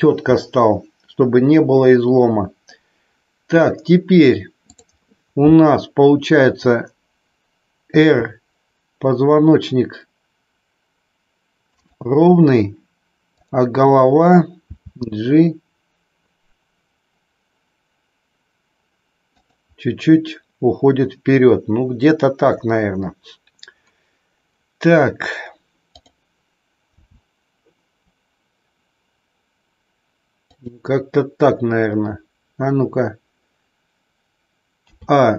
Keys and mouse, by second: 4.5 click, 7.9 r, 11.7 click, 14.7 g, 26.9 g, 30.5 click, 34.8 a.